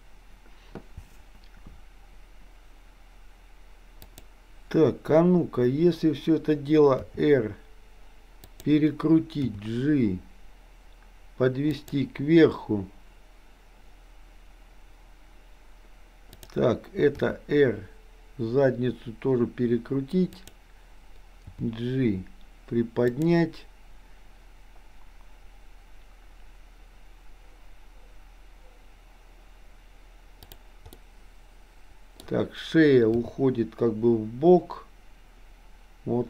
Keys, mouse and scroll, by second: 4.0 click, 7.1 r, 9.6 g, 16.3 click, 17.3 r, 21.6 g, 30.5 click, 31.0-32.2 middle drag, 33.2 g.